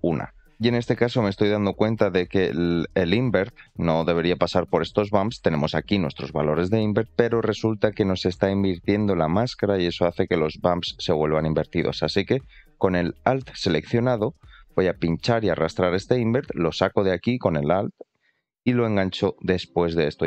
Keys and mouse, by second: 0.5-1.8 middle drag, 4.1 shift+middle click, 8.3 shift+middle click, 15.6-20.2 alt+drag.